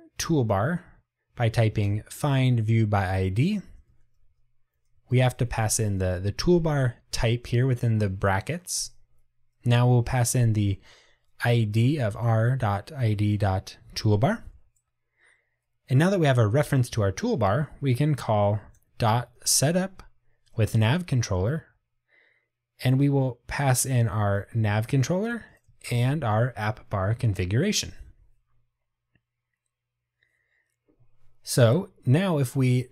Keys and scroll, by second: 2.8 Tab, 6.9 Escape, 13.9 Tab, 20.6 Return, 26.2 Tab.